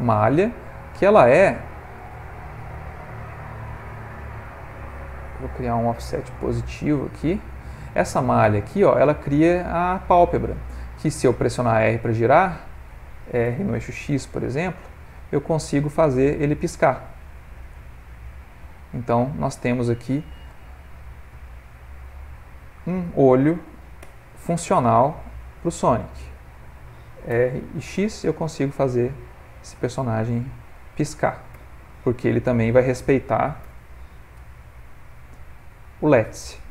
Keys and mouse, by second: 30.5 click, 31.6 r, 33.6 r.